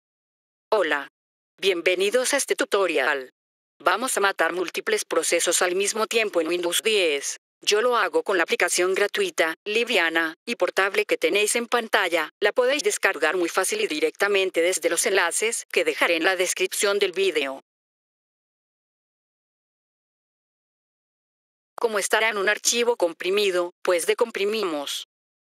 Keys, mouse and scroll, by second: 0.2 click, 6.5 click, 12.0 click, 13.7 click, 16.7 click, 18.5 right click, 21.2 F3, 21.5 click, 23.0 right click.